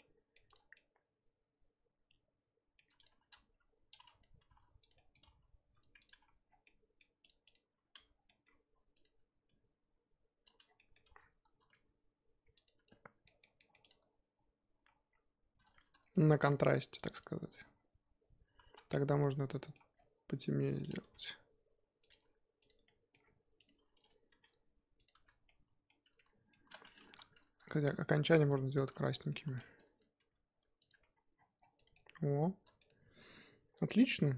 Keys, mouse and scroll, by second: 0.0-0.5 middle drag, 0.5 click, 0.7-3.0 middle drag, 3.0 click, 3.1 Tab, 3.3 a, 3.5-4.0 scroll up 1, 4.2 click, 4.4 g, 4.9 middle click, 5.2 g, 6.1 Tab, 6.5 scroll down 4, 6.6-7.3 middle drag, 7.4 click, 7.7 Tab, 7.9 a, 9.0 click, 10.4 click, 11.1 g, 12.8 Tab, 13.6 middle drag, 13.8 click, 15.1 scroll up 2, 17.2 click, 17.4 Tab, 17.6-18.6 scroll up 1, 18.6 a, 18.8 scroll down 2, 20.8 click, 21.2 g, 22.1 Tab, 22.7 click, 22.8-23.2 middle drag, 23.2 scroll up 2, 23.7 Tab, 24.3 g, 25.1 Tab, 25.5-26.7 middle drag, 26.7 scroll up 2, 26.8 Tab, 27.0 3, 27.7 alt+click, 28.5 shift+click, 30.2 g, 30.9 Tab, 31.3-31.8 scroll down 7, 31.8 click, 31.9-34.3 middle drag.